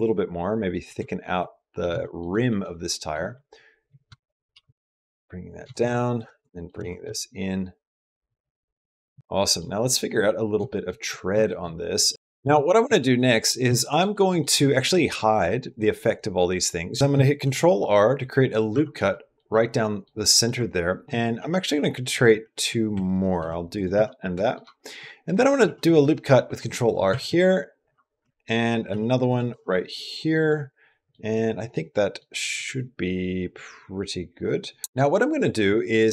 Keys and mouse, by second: 0.2 click, 0.9 shift+middle click, 1.2 middle click, 1.8 shift+middle click, 2.5 middle click, 4.0 shift+click, 4.3-6.6 typing, 6.3 shift+click, 9.2 middle click, 9.6 shift+middle click, 10.0 middle click, 10.5 shift+middle click, 11.3 shift+middle click, 12.1 middle click, 12.3 Tab, 12.7 Tab, 13.0 click, 14.0 middle click, 15.2 click, 15.5 click, 15.9 click, 17.2 ctrl+r, 19.0 middle click, 19.1 click, 19.6 middle click, 19.6 click, 20.2 click, 21.2 ctrl+r, 23.2 ctrl+r, 24.2 middle click, 24.6 shift+click, 25.0 click, 25.4 ctrl+r, 28.7 ctrl+r, 29.8 middle click, 30.4 middle click, 31.3 middle click, 31.3 click, 31.7 click, 34.8 click, 34.8 typing, 35.6 click.